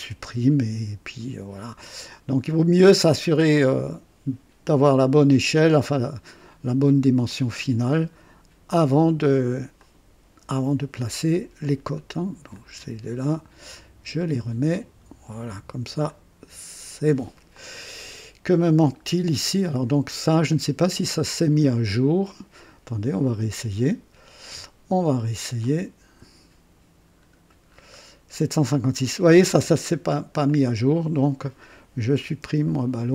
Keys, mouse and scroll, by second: 0.0 Delete, 1.8 click, 3.5 click, 5.7 click, 7.2-8.1 drag, 9.7 click, 10.5 Delete, 12.5 click, 14.7 click, 16.1-17.2 drag, 17.5 click, 18.4 scroll up 1, 19.0 scroll up 1, 22.8 click, 25.6 click, 27.1-27.5 scroll up 1, 27.7-28.0 scroll up 1, 30.4 click, 32.2 Delete.